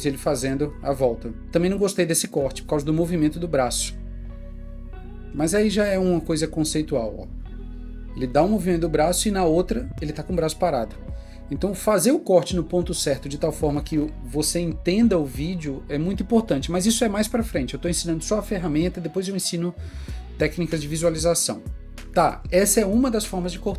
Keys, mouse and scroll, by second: 5.8 click, 13.4 click.